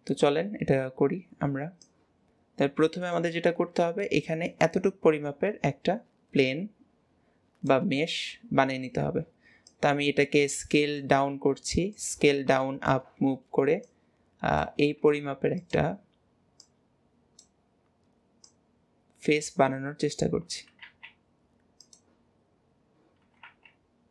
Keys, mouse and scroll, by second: 1.9 click, 9.7 click, 12.3 scroll up 1, 12.6 shift+middle click, 13.3-13.9 scroll up 1, 13.9 click, 16.6 click, 18.5 click.